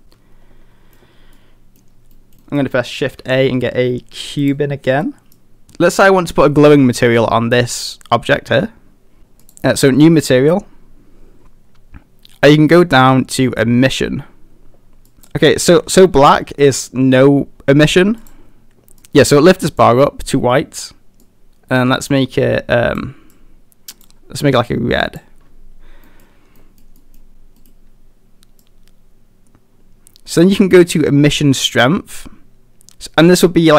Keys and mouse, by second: 0.0 a, 0.0-1.0 middle drag, 1.4-1.8 middle drag, 2.2 middle drag, 2.4 middle click, 3.2 shift+a, 5.4 drag, 9.4 click, 26.1 middle click, 26.6 middle drag, 27.0 middle drag, 27.6 middle click, 28.8-33.7 drag.